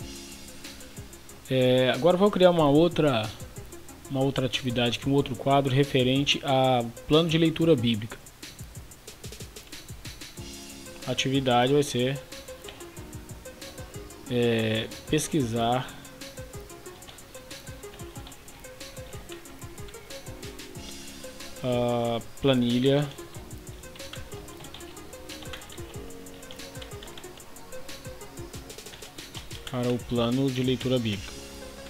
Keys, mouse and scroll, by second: 12.2 shift+p, 12.7 BackSpace, 14.9 shift+p, 16.5-20.2 typing, 21.2 typing, 22.9-27.9 typing, 28.9-31.8 typing.